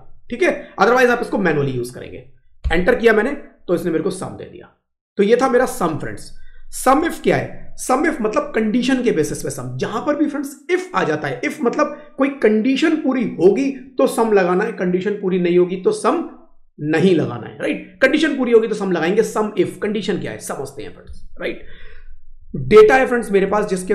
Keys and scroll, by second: 12.0 typing.